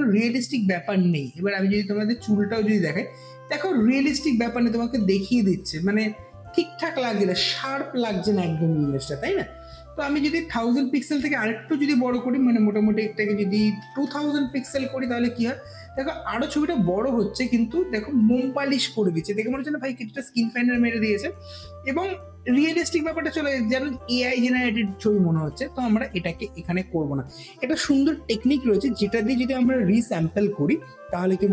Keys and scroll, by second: 13.6 KP_2, 13.8 KP_0, 14.4 KP_0, 14.4 n.